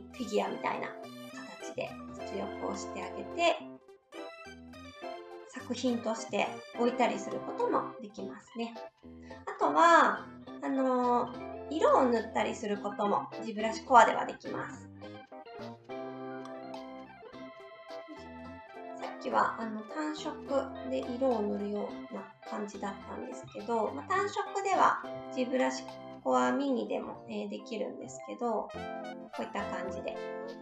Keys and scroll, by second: 27.3 ctrl+z, 27.8 ctrl+z.